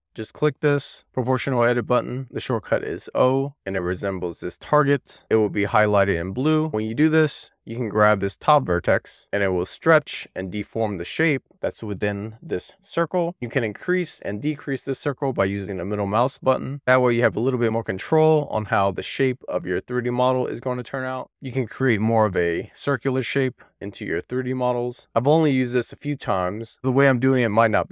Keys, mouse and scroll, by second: 1.4 click, 3.6 click, 14.1 super+z, 15.4 click, 15.9-16.5 scroll down 4, 16.5-17.3 scroll up 1, 17.3-18.1 scroll up 3, 18.1-21.2 scroll up 9, 21.2 alt+z, 21.9 click.